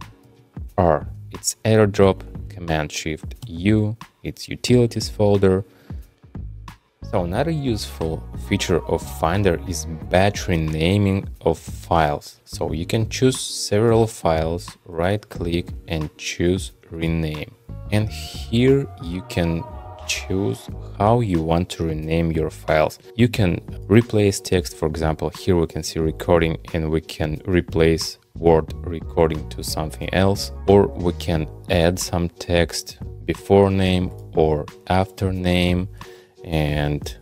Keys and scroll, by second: 0.2 shift+super+r, 3.4 shift+super+u.